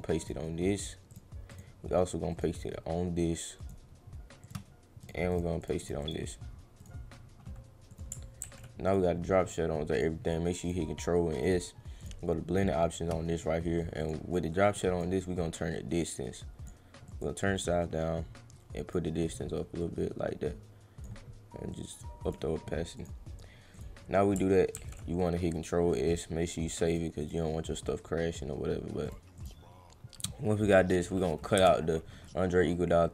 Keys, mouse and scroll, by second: 0.2 click, 1.1 click, 1.5 click, 2.3 right click, 3.6 click, 4.4 click, 5.0 click, 5.3 click, 5.6 click, 5.8 click, 6.0 click, 6.8 right click, 7.9 click, 8.9 click, 9.9 click, 11.3 right click, 12.0 click, 14.0 click, 14.7 drag, 15.9 click, 17.1 drag, 17.6 click, 19.8 click, 21.7 click, 22.9 click, 23.7 click, 24.7 ctrl+s, 26.1 click, 26.9 click, 27.2 click, 29.0 click, 29.3 click, 32.3-33.1 drag.